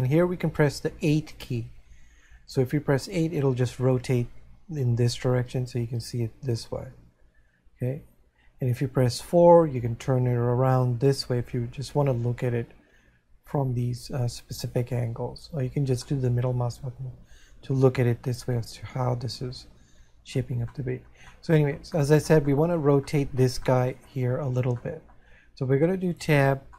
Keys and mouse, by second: 5.2 8, 9.5 4, 16.6 middle click, 23.0 middle click.